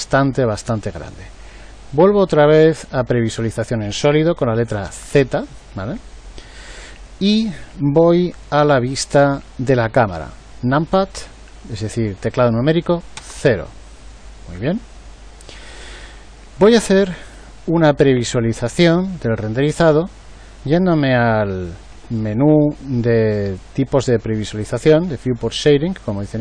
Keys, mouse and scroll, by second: 4.8 z, 13.1 KP_0.